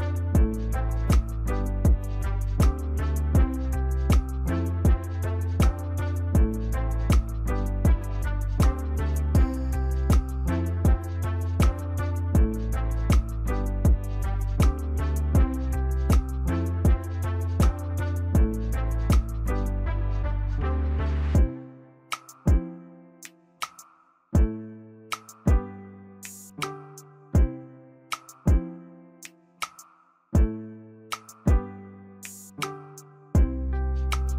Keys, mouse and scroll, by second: 9.8 right click, 19.6 scroll up 1, 19.6-20.8 scroll down 1, 20.8 scroll up 3, 20.9 scroll down 1, 21.0 right click, 26.5 double click, 31.1 right click.